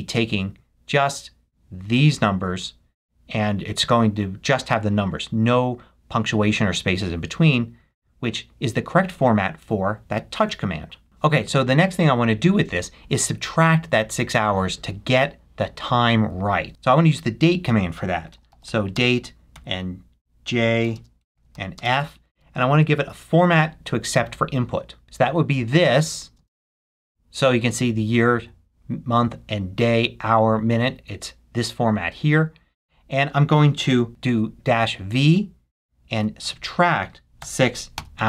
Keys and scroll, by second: 18.1-19.5 typing, 20.8 j, 20.9 space, 25.0 super+v, 26.4 space, 33.9 -, 36.4 -, 37.7 shift+6.